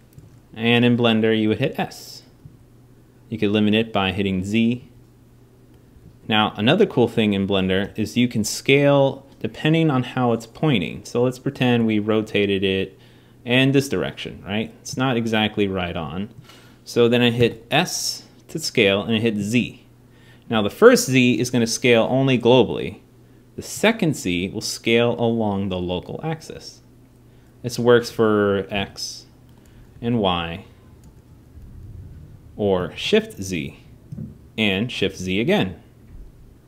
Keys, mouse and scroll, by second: 1.4 s, 7.3 t, 7.6 n, 11.5 r, 17.1 s.